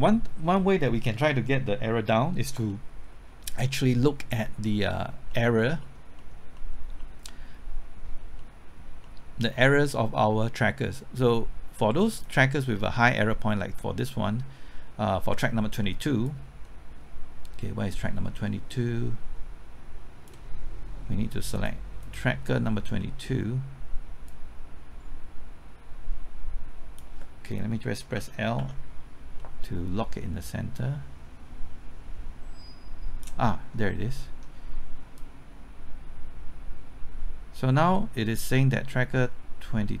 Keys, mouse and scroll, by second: 2.7-6.2 middle drag, 12.1-20.8 drag, 23.0 middle click, 24.3-27.8 drag, 28.1-28.6 typing, 29.4 middle click, 30.7-33.5 drag, 33.5 middle click, 33.9 scroll up 1, 34.2 middle click, 35.2-40.0 drag.